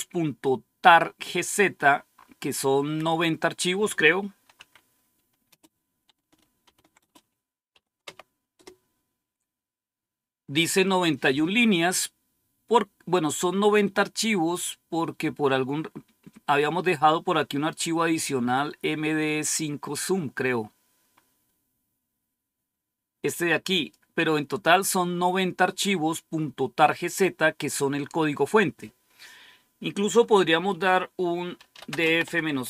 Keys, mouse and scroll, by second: 1.6-2.5 scroll up 1, 2.5 scroll up 1, 2.6-4.4 scroll down 1, 5.4 typing, 6.5-8.4 typing, 14.0-15.0 scroll up 1, 15.6-16.0 scroll up 1, 16.9-18.7 scroll down 2, 20.5-22.0 scroll up 2, 23.2 click, 27.5-28.0 scroll down 1, 31.2-32.6 typing.